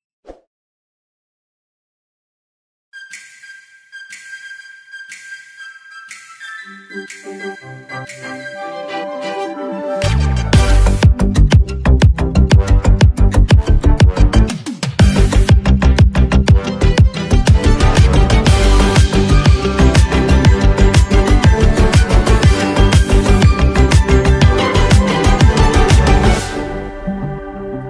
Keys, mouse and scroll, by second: 1.3-1.8 typing, 2.3 click, 3.6 space, 3.7 click, 4.7 space, 4.8 click, 6.5 space, 6.6 click, 7.1 space, 7.2 click, 8.5 space, 8.6-11.1 drag, 11.1 space, 11.2 click, 12.7 space, 12.8 click, 13.3 space, 13.4 click, 14.7 space, 14.7 click, 16.2 space, 16.3 click, 16.8 space, 16.9 click, 17.3 space, 17.6 click, 17.7 space, 18.3 click, 18.9 space, 19.0 click, 19.4 space, 20.2 click, 20.5 space, 21.3-23.2 drag, 23.2 space, 23.3 click, 24.9 space, 25.1 click, 25.1 click, 25.4 space, 25.7 click, 25.9 space, 26.3 click, 26.4 space, 27.5 click.